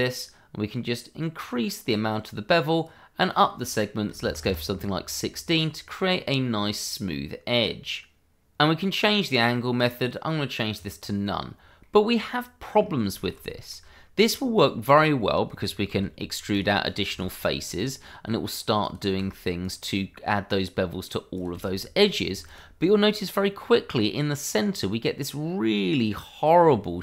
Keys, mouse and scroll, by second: 1.3 click, 4.1 1, 4.2 6, 4.4 Return, 5.5-6.0 scroll up 1, 6.0 middle click, 7.5 click, 9.7 click, 11.4-11.8 scroll down 1, 11.8 middle click, 12.7-13.1 scroll up 1, 13.1 shift+middle click, 13.4 middle click, 13.8 Tab, 14.8 click, 15.1 middle click, 15.9 e, 16.5 click, 16.9 double click, 17.0 e, 17.7 click, 18.2 middle click, 18.8 click, 19.1 e, 19.6 click, 20.0 middle click, 20.5-20.8 scroll down 1, 20.8 middle click, 21.3 click, 21.5 e, 22.4 click, 22.9 middle click, 23.6-24.0 scroll up 1, 24.0 middle click, 24.6 scroll up 1, 25.4 middle click, 26.9 Tab.